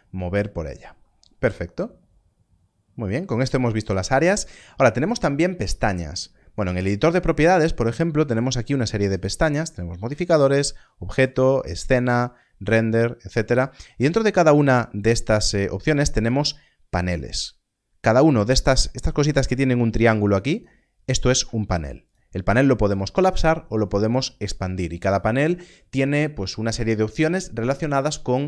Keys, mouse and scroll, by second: 0.8 click, 9.4 click, 20.5 click.